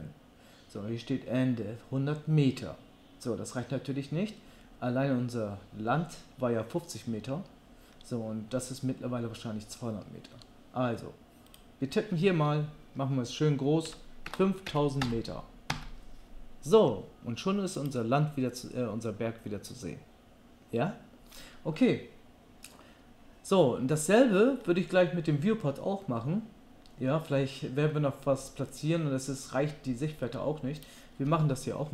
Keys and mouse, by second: 11.5-17.9 drag, 15.0 KP_0, 17.9-30.9 middle drag, 30.9-31.9 drag.